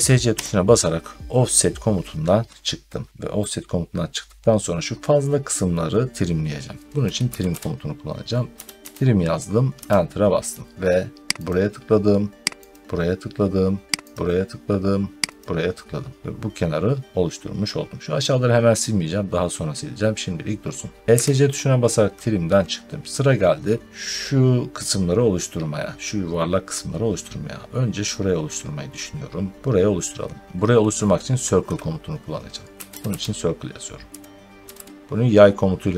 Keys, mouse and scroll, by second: 0.2 Escape, 3.2 middle click, 6.9-9.0 typing, 9.6 Return, 11.3 click, 12.6 click, 14.0 click, 15.3 click, 16.2-16.7 scroll, 22.5 middle click, 32.4-35.1 typing.